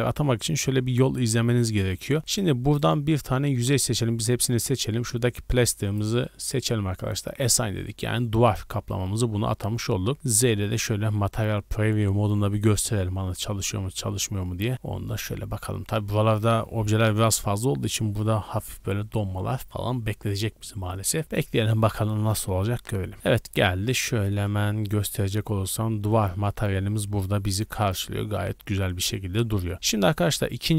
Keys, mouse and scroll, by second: 1.3-2.2 middle drag, 2.2 right click, 2.7 right click, 4.1 a, 5.9 click, 7.3 click, 8.6 middle drag, 8.9 scroll up 1, 9.4 middle click, 9.6 scroll up 1, 9.9-15.0 scroll down 2, 10.1 z, 23.1-23.7 scroll down 2, 23.5 middle click, 23.7 scroll up 1, 24.0-24.3 middle drag, 24.3 scroll up 1, 24.7-25.3 shift+middle drag, 25.2 scroll up 2, 25.6-26.4 middle drag, 26.4 Tab, 26.8-27.6 scroll down 3, 27.6 a, 27.8 a, 28.0-28.8 middle drag, 30.0 Tab, 30.4-30.7 middle drag.